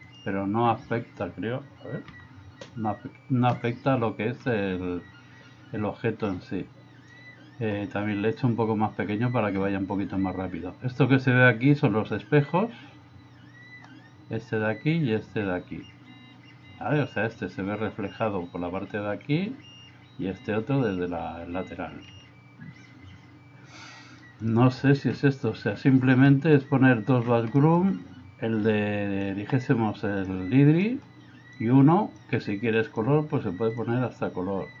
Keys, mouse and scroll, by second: 0.1 click, 25.6 middle click, 27.6 middle click, 29.4-30.4 drag, 30.9 middle click, 31.7 click, 32.9 click.